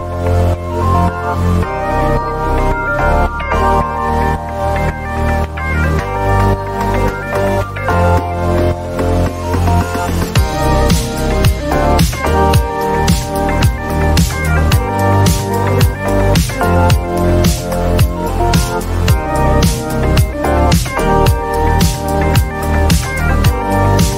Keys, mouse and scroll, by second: 0.4-3.0 right drag, 3.0 click, 5.7-9.1 drag, 9.6 Delete, 10.3 click, 10.4 Delete, 11.6 click, 11.9 click, 12.4 click, 15.7 click, 16.1 shift+click, 16.4 shift+click, 17.2 right click, 19.7 click, 21.6 click, 22.6 click.